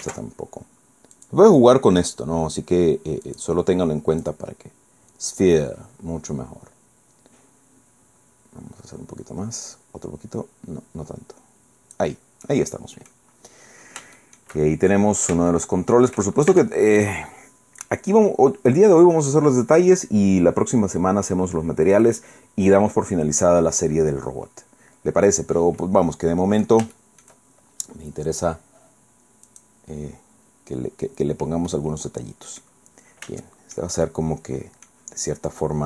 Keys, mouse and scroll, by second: 0.0 ctrl+z, 1.2 click, 3.2 click, 4.2-5.8 drag, 8.4 scroll down 2, 9.7 scroll down 2, 10.6 scroll up 2, 12.4 click, 14.2-15.4 shift+drag, 16.5 shift+Tab, 24.5-24.8 scroll down 2, 25.8-26.8 drag, 27.0 shift+click, 27.3 shift+right click, 27.4 shift+scroll up 1, 29.5 click, 30.5-30.8 scroll up 1, 31.0-31.7 scroll down 1, 31.7-32.8 drag, 33.4 shift+click, 34.0-35.0 shift+drag.